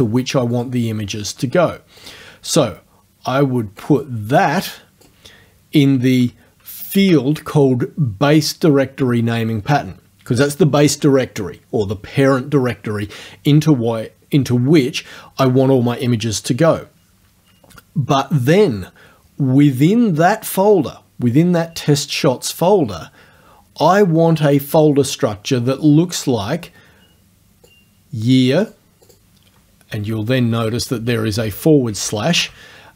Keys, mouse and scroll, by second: 0.6 click, 2.1 click, 3.9 click, 4.4 click, 7.0 ctrl+v, 27.7 click, 28.7 click, 29.1 click, 31.0 Left, 31.4 Right, 31.9 Left, 32.4 Right.